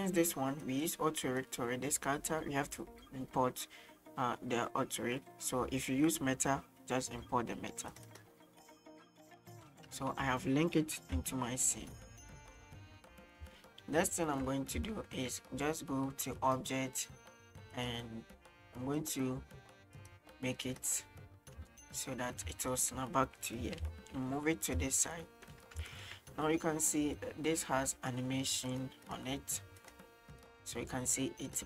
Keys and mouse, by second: 9.4-9.7 middle drag, 10.1 middle drag, 11.0 KP_1, 12.2 shift+middle click, 13.6-14.0 shift+middle drag, 14.3 shift+middle drag, 15.0 shift+middle drag, 16.4-18.1 right drag, 19.1-20.9 drag, 21.7 shift+middle click, 22.6 shift+middle drag, 23.6 g, 24.0 x, 24.8 x, 25.0 shift+middle click, 27.2-28.2 drag, 28.7 right click, 29.1 right click, 29.8 right click, 30.5-31.6 drag.